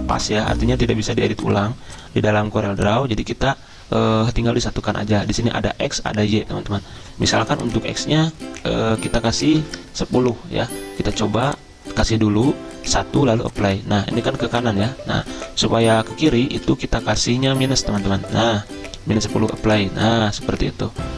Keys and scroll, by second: 9.3-10.2 typing, 16.5 ctrl+z, 18.4 -.